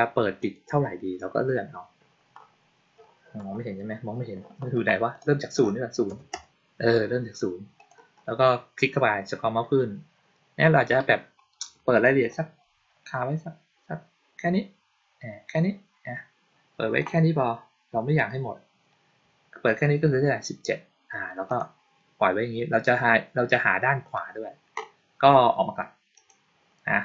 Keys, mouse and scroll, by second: 0.3 click, 1.0-2.8 scroll up 2, 2.8-3.1 scroll down 2, 3.9 scroll down 2, 4.0-4.9 scroll up 2, 5.1 click, 7.6 click, 9.0-10.2 scroll down 2, 10.2-11.7 scroll down 1, 11.7-13.4 scroll down 1, 13.4-15.8 scroll down 1, 21.3 click, 26.0 click.